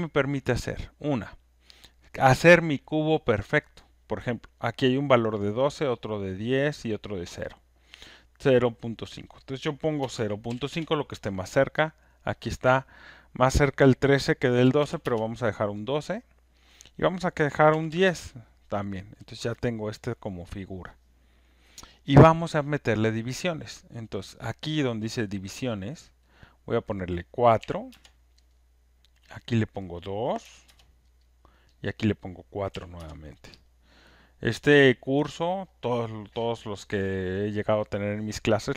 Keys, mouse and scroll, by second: 1.2 click, 6.0 click, 6.9 click, 8.2 click, 8.9 click, 9.8-11.2 typing, 12.0 click, 14.4-15.1 typing, 16.7 click, 17.7 typing, 17.9 Return, 24.1 click, 26.4 click, 27.6 4, 27.9 Return, 29.4 Return, 29.4 click, 30.4 Return, 31.8 click, 32.7 Return.